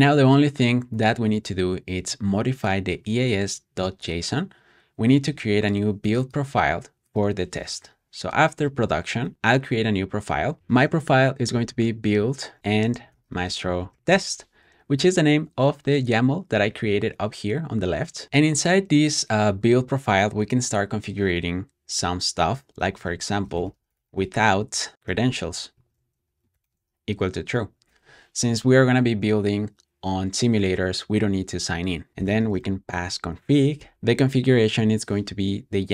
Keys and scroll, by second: 7.7 Escape, 8.2-9.6 typing, 10.6 Return, 11.0-14.4 typing, 18.0-18.7 typing, 22.7-24.5 typing, 25.6-27.8 typing, 31.8-32.9 typing.